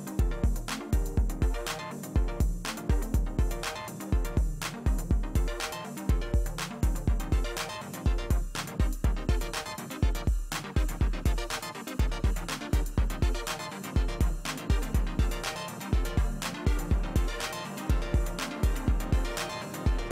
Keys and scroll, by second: 12.1 ctrl+alt+z, 18.3 space.